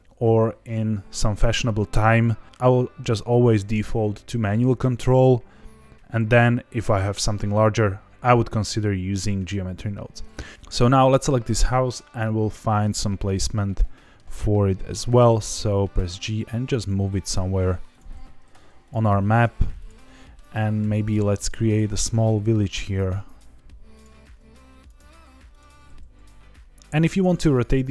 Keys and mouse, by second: 10.5 middle drag, 13.3-14.1 middle drag, 15.9 g, 17.9 click, 18.1 s, 18.8 click, 18.9 g, 19.7 click, 20.0 middle click, 20.8 alt+d, 21.6 click, 21.8 s, 22.4 click, 22.9 alt+d, 23.9 click, 24.2 alt+d, 24.7 click, 25.1 alt+d, 25.5 click, 25.6 r, 25.8 z, 26.1 z, 27.0 click, 27.6-27.9 middle drag.